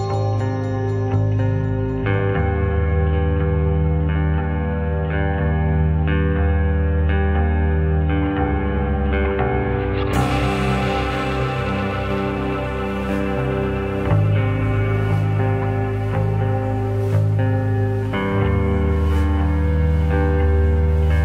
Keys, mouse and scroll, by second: 1.9 ctrl+r, 4.2 ctrl+z, 4.6 click, 5.3 ctrl+r, 6.4 ctrl+r, 7.5 click, 7.7 middle click, 8.3 scroll up 2, 8.7-11.2 middle drag, 11.9 ctrl+r, 12.6 click, 12.8 middle click, 13.4 click, 14.2 click, 14.5 middle click, 15.3 g, 18.4 click, 18.6-21.2 middle drag.